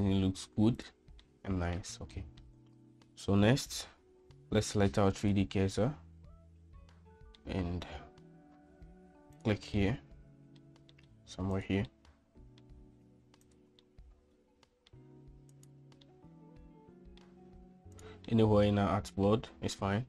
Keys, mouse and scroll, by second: 1.3-1.8 middle drag, 2.1-2.4 shift+middle drag, 5.2 click, 7.4-7.8 middle drag, 9.8-10.6 middle drag, 11.6 click, 11.9-12.6 middle drag, 13.5 click, 13.9-14.9 middle drag, 15.6 click, 16.2-17.2 middle drag, 18.0 right drag, 18.4-19.3 middle drag.